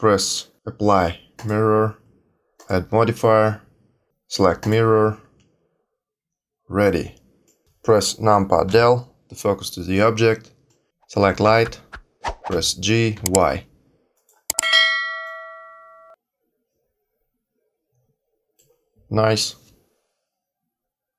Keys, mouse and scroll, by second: 1.3 click, 2.5 click, 6.4-7.4 scroll down 2, 7.4 middle click, 8.6 KP_Decimal, 10.6 middle click, 12.5 g, 15.2 middle click.